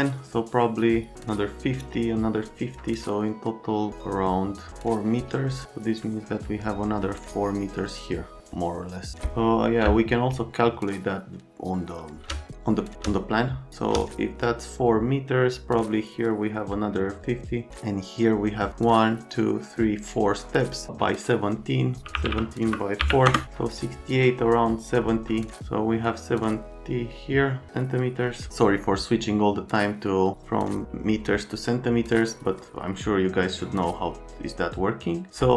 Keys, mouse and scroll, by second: 9.8 space, 10.4 click, 12.5 click, 12.5 space, 13.7 click, 13.7 space, 22.1 KP_1, 22.2 KP_7, 22.6 KP_Multiply, 23.0 KP_4, 23.2 KP_Enter.